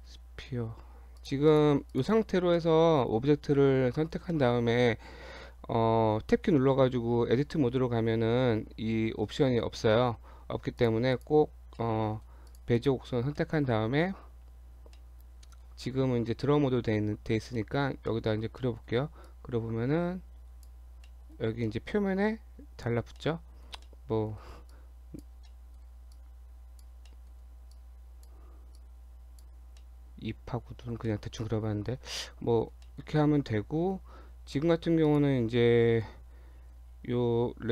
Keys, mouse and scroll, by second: 1.2 click, 1.5 click, 1.9 click, 2.6 middle click, 4.3 shift+middle click, 7.4 Tab, 10.3 Tab, 10.8 click, 11.1 click, 11.8 middle click, 12.5 click, 12.8 click, 13.4 middle click, 13.8 Tab, 15.0 middle click, 17.6 middle click, 17.8 scroll up 1, 18.1 middle click, 18.4 scroll up 1, 18.6 middle click, 19.3 click, 21.0 middle click, 21.4 scroll up 1, 21.6 middle click, 23.2 middle click, 23.9 middle click, 24.8 click, 25.5 middle click, 26.1 click, 27.1 middle click, 27.7 click, 28.8 click, 29.8 middle click, 30.9 scroll down 1, 31.1 middle click, 32.1 scroll down 1, 32.9 middle click, 33.8-34.1 scroll up 2, 35.1 click, 35.8-36.1 scroll up 1, 36.1-37.7 scroll down 8.